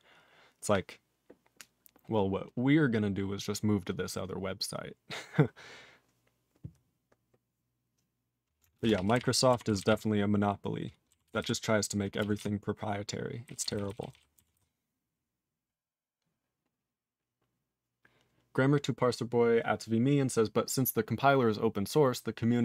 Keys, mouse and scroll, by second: 8.8 ctrl+space, 8.8 ctrl+a, 9.0 ctrl+p, 9.1 ctrl+g, 9.2 ctrl+e, 9.7 ctrl+s, 9.8 ctrl+n, 9.9 ctrl+e, 11.3 ctrl+s, 11.4 ctrl+n, 12.4 ctrl+s, 13.5 ctrl+n, 13.6 ctrl+n, 13.7 ctrl+n, 13.9 ctrl+n, 14.0 ctrl+n, 14.1 ctrl+n, 14.5 ctrl+s.